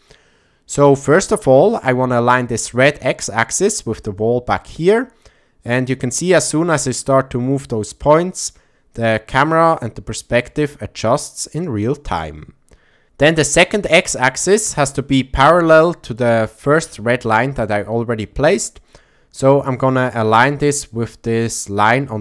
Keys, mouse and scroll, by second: 3.1-5.0 drag, 6.0-9.5 drag, 11.6-13.0 drag, 14.5-16.2 drag, 18.5-18.9 shift+middle drag, 19.5-19.8 shift+middle drag, 20.9 click.